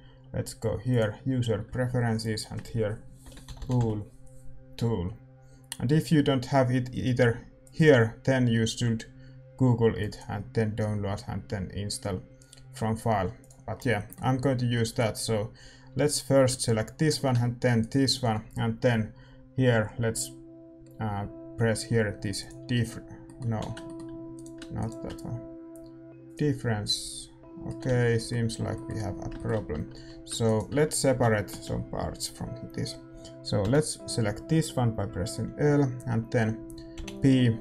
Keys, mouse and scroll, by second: 1.0-3.2 drag, 13.7-14.0 scroll up 1, 14.0-17.7 middle drag, 15.8 a, 16.0-22.4 right drag, 22.4-24.3 drag, 23.2 middle click, 23.6 ctrl+z, 24.0 a, 24.3-26.3 middle drag, 24.3-26.8 right drag, 26.3-28.5 drag, 27.9 ctrl+z, 28.5 a, 29.7 Tab, 30.4-31.5 middle drag, 30.4-33.6 right drag, 31.1 a, 31.5 a, 33.6 l.